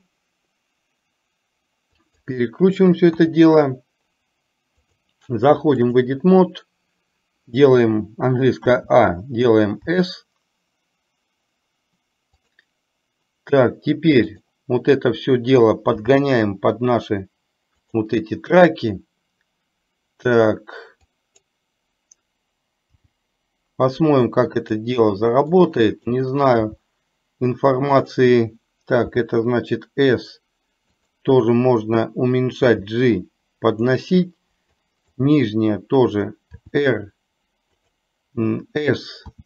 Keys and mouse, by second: 4.9-6.2 drag, 8.7 a, 10.1 s, 14.3 click, 16.1 g, 21.2 click, 23.1 g, 25.6 click, 26.7 g, 29.2 s, 32.8 g, 34.8 click, 36.7 r.